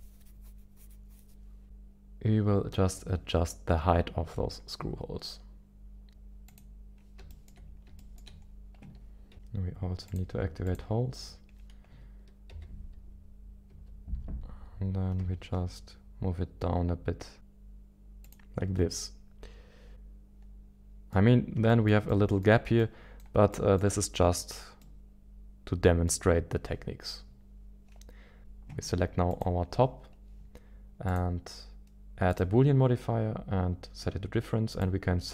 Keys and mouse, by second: 6.4 click, 7.3 shift+middle click, 8.1 shift+middle click, 10.0 click, 10.6 ctrl+click, 12.5 g, 14.7 z, 19.2 ctrl+click, 19.9-21.1 middle drag, 21.7 shift+middle click, 22.1 middle click, 22.8 middle click, 23.5 middle click, 24.8-26.1 middle drag, 29.3-31.0 drag, 34.9-35.3 drag.